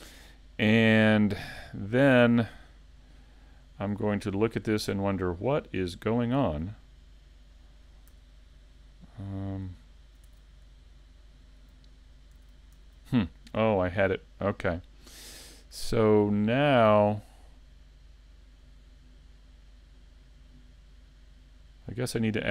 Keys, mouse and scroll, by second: 3.0 middle click, 4.2 shift+middle click, 5.2 middle click, 8.1 a, 9.5 click, 10.3 a, 11.1 middle click, 12.4 a, 12.9 a, 13.2 middle click, 19.4 click.